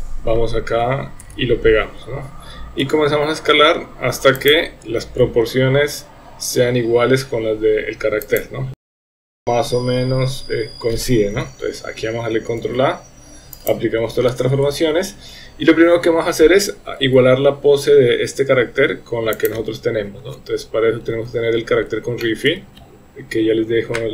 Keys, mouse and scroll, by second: 1.3 ctrl+v, 2.8 s, 5.2 s, 8.8 s, 9.0 shift+middle click, 9.2-10.8 shift+middle drag, 11.3 KP_1, 12.6 ctrl+a, 19.4 click, 22.2 shift+middle drag.